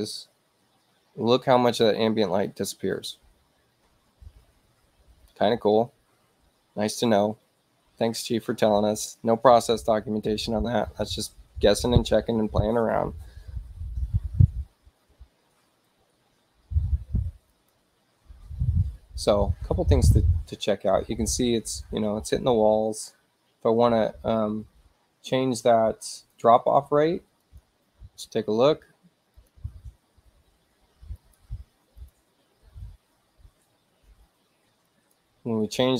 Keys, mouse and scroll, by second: 17.6 click, 26.2 click, 27.5 click, 29.4 click, 31.2 shift+click, 32.0 click, 34.9 click.